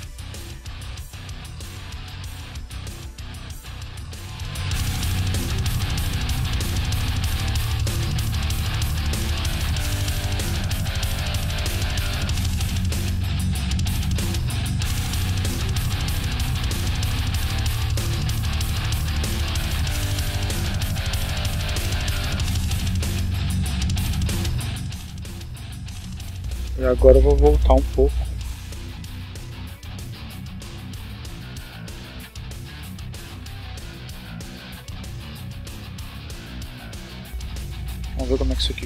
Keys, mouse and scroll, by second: 0.7 click, 2.5 right click, 4.5 r, 5.5 click, 6.0 right click, 8.0 r, 10.5 click, 11.4 right click, 12.0 r, 13.5 click, 16.0-20.7 drag, 21.2 right click, 23.5 r, 24.2 click, 24.7-26.2 right drag, 26.5 r, 27.0 click, 29.0 right click, 29.5 r, 30.0 click, 31.0-32.5 drag, 33.2 click, 34.5 click, 35.5-36.2 drag, 37.0 click, 37.8 click, 38.7 click.